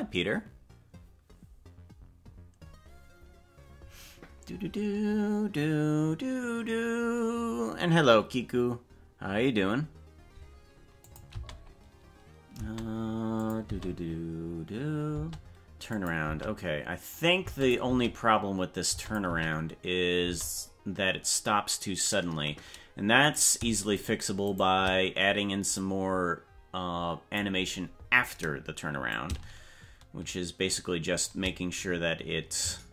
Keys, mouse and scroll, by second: 11.0 click, 11.3 space, 12.5 space, 13.4 click, 13.6 space, 15.1 space, 15.9 click, 16.2 space, 17.4 space, 17.6 click, 18.9 space, 19.0 click, 20.2 space, 23.4 right click, 24.1 shift+right click, 25.8-27.4 drag, 29.1-31.3 shift+drag.